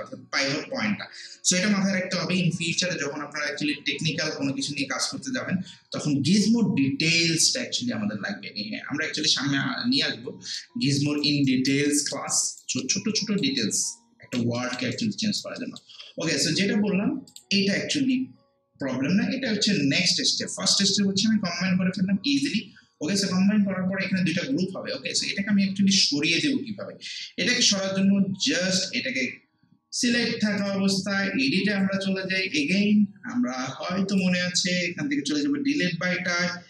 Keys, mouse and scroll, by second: 10.5 alt+right click, 11.9 alt+middle click, 12.3 alt+right click, 12.8 alt+middle click, 13.6 alt+right click, 14.6 alt+middle click, 14.9 alt+right click, 15.6 alt+middle click, 17.3 click, 30.6-36.6 drag.